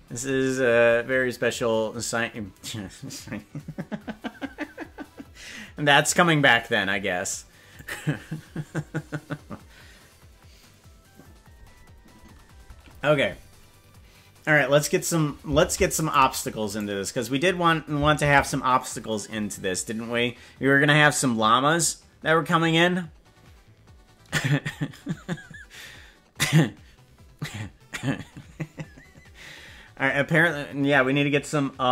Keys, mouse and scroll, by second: 15.2 right click, 15.8 ctrl+Tab, 16.2 right click, 16.8 right click, 20.2 ctrl+s.